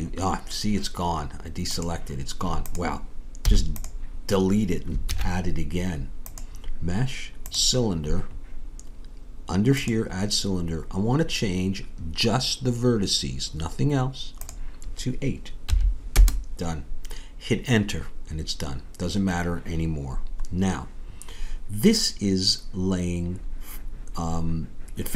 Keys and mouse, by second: 3.4 x, 5.0 shift+a, 10.0-13.8 drag, 19.1-24.5 middle drag.